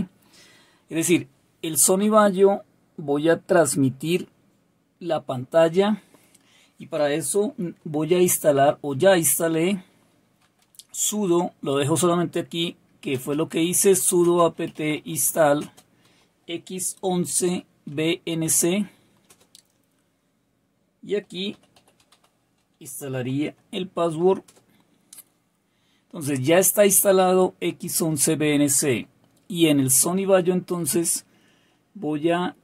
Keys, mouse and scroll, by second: 9.9-11.6 typing, 13.1-16.0 typing, 17.0-19.2 typing, 20.9-23.4 typing, 24.4 typing.